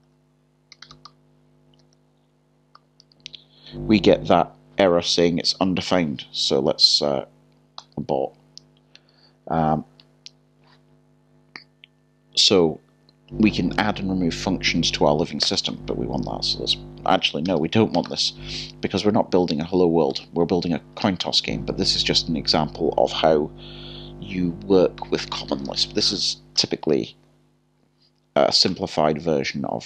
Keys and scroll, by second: 0.7-2.8 typing, 17.4 typing, 18.7-21.2 typing, 19.6 Return, 28.7 typing.